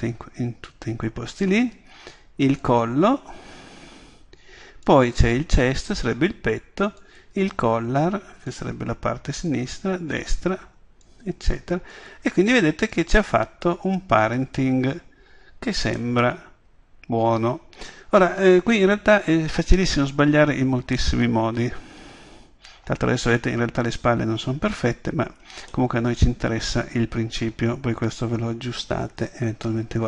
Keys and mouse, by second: 0.8-2.7 middle drag, 4.5 middle click, 16.0-21.3 middle drag, 21.6 middle click, 22.0 middle click, 27.7 middle click, 28.2 middle click.